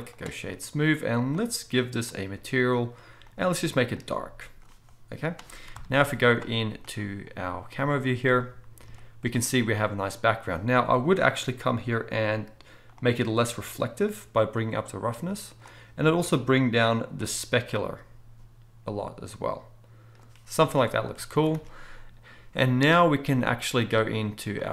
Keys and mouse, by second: 1.3 click, 2.1-3.3 drag, 5.7 KP_0, 5.8 middle click, 6.1 z, 13.0-18.6 middle drag, 13.6-18.6 drag, 13.6-18.6 right drag, 20.6 alt+a, 21.3 ctrl+s, 21.5 ctrl+s.